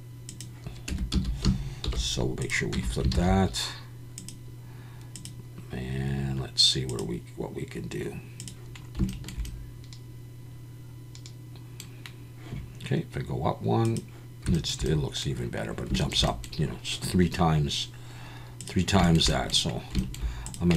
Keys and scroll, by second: 0.9 Tab, 1.1 a, 1.8 alt+n, 2.8 Tab, 3.1 alt+a.